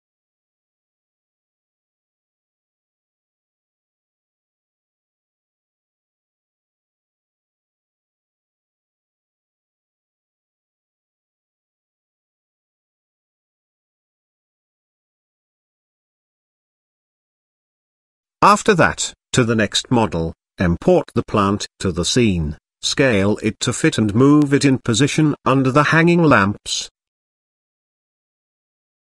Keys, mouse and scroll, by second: 0.3 ctrl+j, 1.1-1.4 middle drag, 1.9 shift+middle drag, 2.7 ctrl+s, 3.2 KP_0, 5.8-6.8 drag, 8.6-8.9 middle drag, 9.3-9.6 shift+middle drag, 10.2-10.6 middle drag, 10.8-11.5 shift+middle drag, 14.4-14.7 middle drag, 16.1 click, 18.5 click, 21.3 ctrl+v, 21.7 KP_Decimal, 22.1 scroll up 1, 22.3-22.7 middle drag, 23.4 KP_1, 23.9 z, 25.5 g, 26.9 s, 28.3 s.